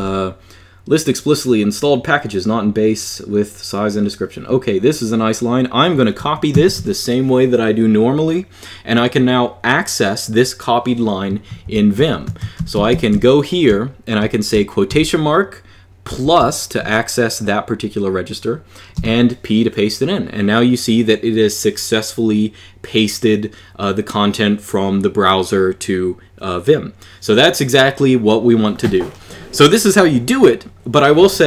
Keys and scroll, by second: 6.3 ctrl+c, 11.4 super+Page_Up, 12.2 Escape, 12.4 j, 12.5 j, 12.7 j, 12.9 j, 14.7 shift+', 18.7 p.